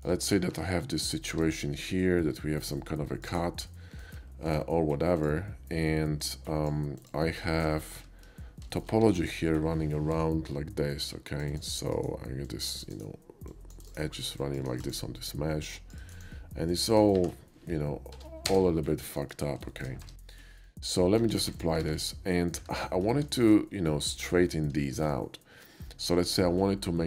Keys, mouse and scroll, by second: 0.5 Tab, 2.7 click, 3.7-4.0 middle drag, 4.2 KP_5, 4.5 KP_5, 4.5 d, 5.2 click, 6.2-6.7 drag, 7.0 click, 7.5 middle click, 8.3 KP_5, 8.6 shift+middle click, 8.7 middle click, 9.0 Tab, 10.1 k, 11.1 click, 11.5 click, 12.0 right click, 12.5 click, 12.8 click, 13.5 click, 13.8 click, 13.9 right click, 14.4 click, 14.7 right click, 15.7 click, 16.0 right click, 16.2 click, 16.7 click, 16.9 right click, 18.1 Tab, 18.3 1, 18.5 space, 18.7 middle click, 18.9 middle click, 19.3 KP_5, 19.7 shift+middle click, 20.0 Tab, 20.5 middle click, 21.2 q, 21.6 click, 21.9 Tab, 22.3 middle click, 22.6 `, 23.1 KP_5, 23.4 shift+middle click, 24.0 click, 24.9 shift+middle click.